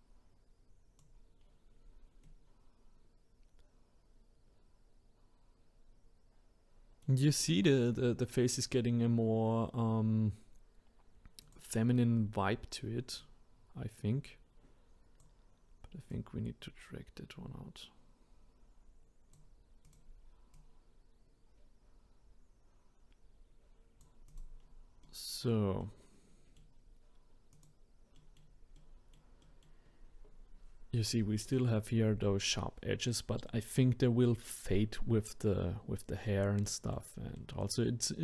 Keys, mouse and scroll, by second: 1.4-2.2 scroll down 2, 2.2-5.2 middle drag, 7.8-8.3 scroll down 1, 8.3-11.4 middle drag, 11.4 click, 12.1-13.2 scroll up 2, 13.2 click, 16.1 click, 19.8 click, 20.5 click, 24.3 click, 24.6-25.0 scroll down 3, 25.0-27.5 middle drag, 27.5 click, 28.2-29.9 middle drag, 29.9-30.7 scroll up 2, 33.5-36.6 middle drag, 36.7-38.2 middle drag.